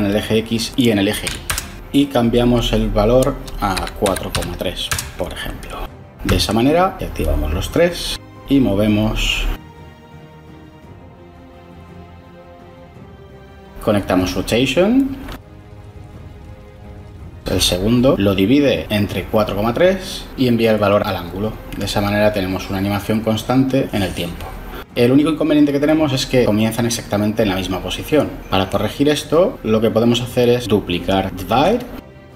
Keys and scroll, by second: 1.1 1, 1.3 Return, 3.7-4.7 typing, 4.8 Return, 30.9 shift+d.